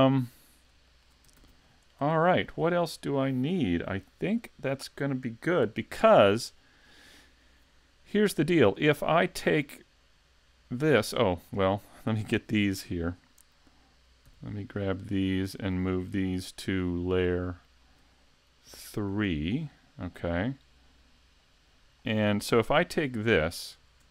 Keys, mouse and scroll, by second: 0.0 middle click, 0.9 shift+middle click, 1.4 s, 2.2 shift+middle click, 9.2 click, 11.5 middle click, 14.3 b, 18.7 m, 21.4 click, 22.0 middle click, 22.7 a, 23.3 shift+scroll up 1, 23.3 shift+middle click, 23.9-24.1 scroll down 2.